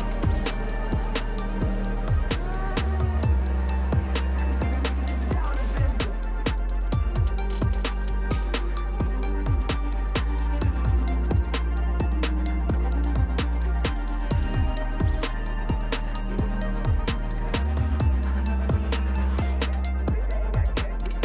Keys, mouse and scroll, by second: 0.8 click, 2.1-3.8 typing, 5.4 click, 6.3 click, 6.4-7.5 typing, 7.8 click, 8.7 click, 8.9 ctrl+c, 9.1 ctrl+d, 9.3 ctrl+d, 9.9 click, 10.2-11.0 scroll, 11.0 click, 11.0-11.5 scroll, 11.2-12.4 typing, 12.3 click, 13.0 click, 13.6-14.5 typing, 13.7 click, 14.8 click, 15.4-16.0 scroll, 18.1 click, 19.3 click, 20.2-21.2 typing.